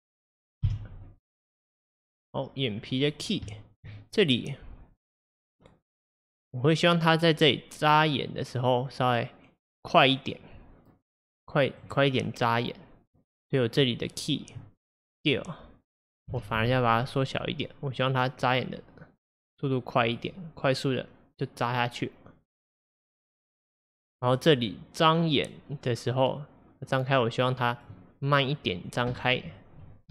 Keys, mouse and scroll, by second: 0.7 h, 2.7-3.6 scroll down 1, 3.6 shift+middle click, 4.3-7.3 drag, 13.3-16.4 drag, 16.4 s, 20.7-24.0 drag, 28.5-30.1 drag.